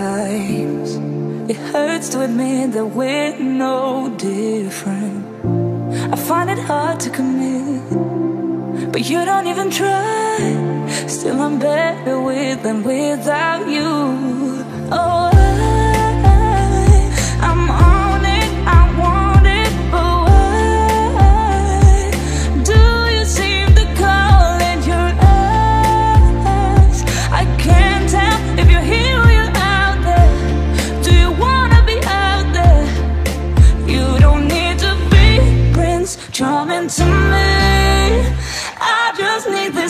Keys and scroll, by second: 38.0 space.